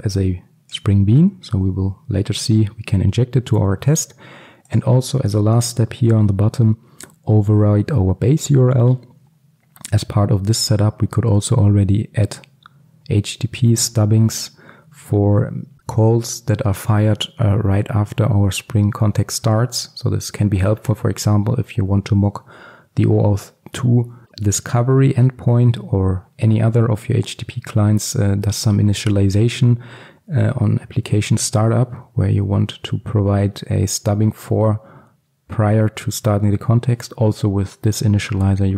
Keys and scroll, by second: 5.4 ctrl+alt+super+l.